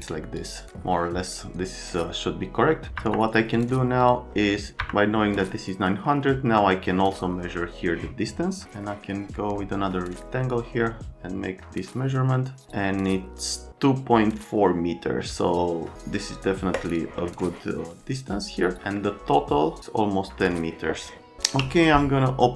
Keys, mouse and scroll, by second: 2.9 F3, 3.5 click, 4.0 click, 21.4 w.